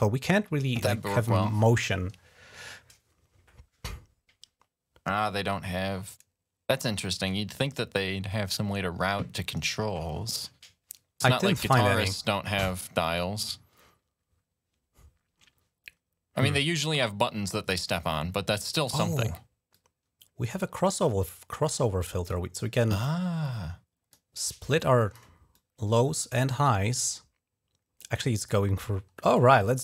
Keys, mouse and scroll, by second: 18.6 click, 18.7 right click, 19.6 click, 21.8 click, 22.5 click, 23.3 click, 24.6 click, 25.4-26.4 drag, 27.8 click, 29.2 click.